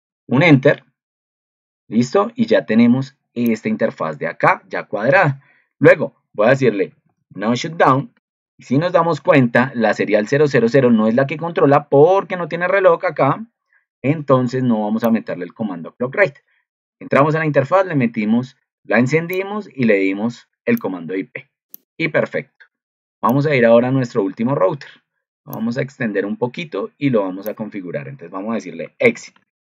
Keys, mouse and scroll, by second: 9.1 ctrl+2.